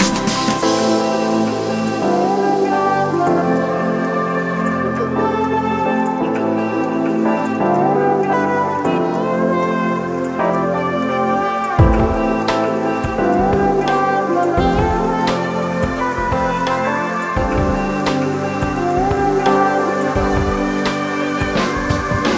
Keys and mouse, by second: 0.9 click, 4.0 right click, 5.1 click, 7.8 click, 10.8 click, 12.6-17.0 drag, 17.3 click, 20.2 click.